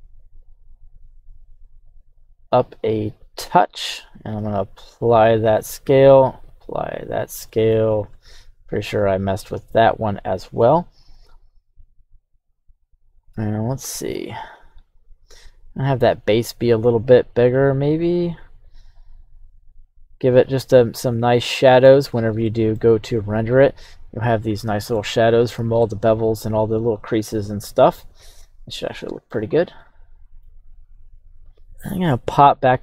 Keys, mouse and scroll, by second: 3.5 click, 4.4 ctrl+a, 5.5-5.8 middle drag, 5.9 right click, 6.5 ctrl+a, 7.5 middle click, 8.0 right click, 8.4 ctrl+a, 9.4-10.7 middle drag, 11.1 s, 13.3 x, 20.5 click, 21.4-21.9 middle drag, 22.1-22.4 scroll up 1, 22.4-23.4 middle drag, 23.4-24.4 right drag, 25.0-29.3 shift+middle drag, 29.5-29.9 scroll down 2, 29.8-30.5 middle drag, 31.5 shift+middle click.